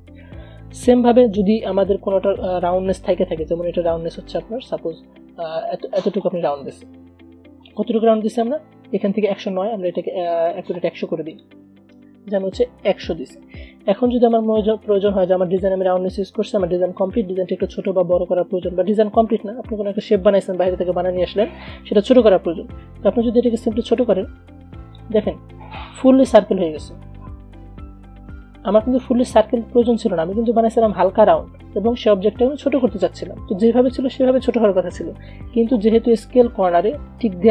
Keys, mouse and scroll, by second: 2.6 a, 3.3-7.4 drag, 7.6-8.7 typing, 11.5 click, 12.1 ctrl+a, 14.3 v, 14.8-24.0 drag, 24.0-27.6 alt+drag, 27.6 ctrl+z, 33.2-37.2 alt+drag, 36.9 ctrl+Num_Lock, 37.2 ctrl+z.